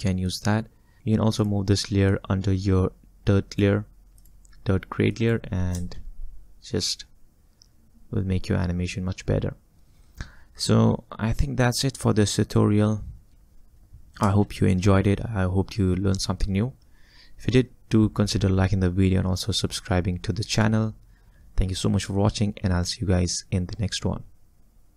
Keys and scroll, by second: 1.0 space, 5.8 space, 14.3 space.